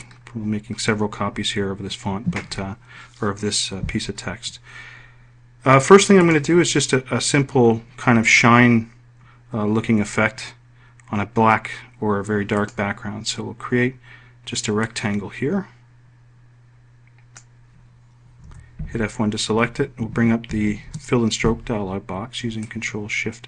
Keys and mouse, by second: 0.7-1.9 right drag, 19.5 F1, 21.5 ctrl+shift+f.